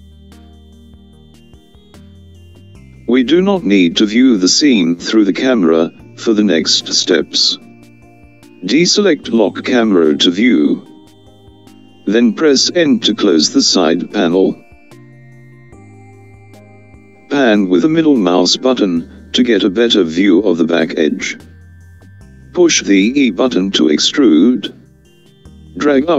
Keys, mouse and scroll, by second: 2.1 n, 7.2 click, 16.6 n, 17.7-20.6 middle drag, 20.6-23.4 scroll down 1, 23.4 e.